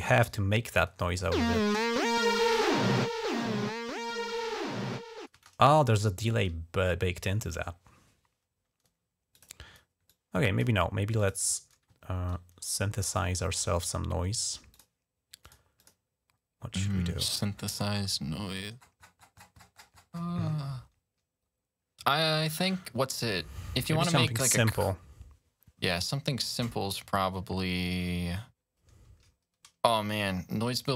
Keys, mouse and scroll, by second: 0.5 click, 1.1 space, 2.6 scroll up 2, 3.2 scroll up 2, 4.2 scroll down 3, 5.2 space, 5.4 scroll down 2, 6.6 scroll up 1, 7.4-8.9 ctrl+scroll down 5, 9.2 click, 9.9 click, 11.0 click, 11.9-12.7 ctrl+scroll down 2, 12.9 right click, 14.5 click, 15.3 click, 15.6 click, 17.4-17.8 scroll down 1, 17.8 scroll up 1, 17.8 scroll down 2, 18.6-19.2 scroll down 5, 19.2 scroll up 2, 19.2-20.1 scroll down 8, 21.5-22.1 scroll down 2.